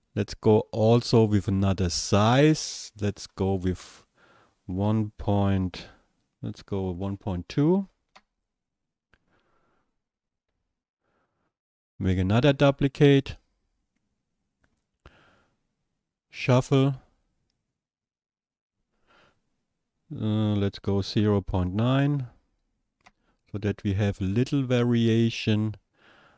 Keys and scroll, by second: 4.8 KP_1, 21.3 KP_0, 22.1 KP_9, 23.1 Return.